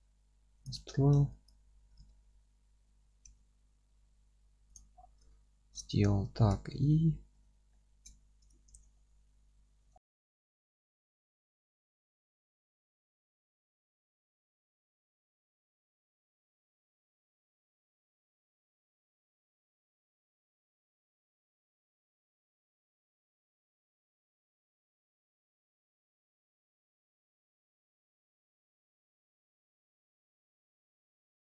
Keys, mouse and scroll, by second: 0.6 click, 0.8 Tab, 1.5 click, 1.9 g, 4.7 click, 4.9-5.3 scroll down 1, 5.3-16.2 alt+middle drag, 6.2 z, 7.4 alt+q, 8.1 z, 8.7 alt+z, 9.9 scroll down 2, 11.2-11.7 scroll down 2, 11.8 scroll up 1, 12.3 scroll down 1, 12.6 scroll up 1, 12.9 scroll down 1, 13.4-13.8 scroll up 1, 13.8 scroll down 1, 14.4-14.7 scroll up 1, 14.9-15.5 scroll up 2, 15.5 scroll down 2, 16.2 click, 16.2 Tab, 16.5 alt+middle click, 16.9 click, 17.1 Tab, 17.2 scroll up 1, 17.4 2, 17.5 click, 17.7 middle click, 18.4 alt+shift+click, 18.6-20.5 middle drag, 18.9 scroll up 1, 19.8 scroll up 1, 20.0 ctrl+b, 20.5 click, 20.6 scroll down 1, 20.9 click, 21.0 Tab, 21.3 click, 21.6 scroll up 1, 21.9 Tab, 22.0 click, 22.3-25.2 middle drag, 23.0 F3, 23.3-23.7 scroll down 1, 23.7 KP_1, 24.5 alt+z, 24.8 scroll up 1, 24.9 alt+z, 25.2 click, 25.6 Tab, 26.3 click, 26.5 Tab, 26.6 click, 26.8 Tab, 27.0 1, 27.3 F3, 28.0 click, 28.4 g, 30.9 click, 31.0 scroll up 1, 31.3 scroll down 1, 31.4-31.5 scroll up 2.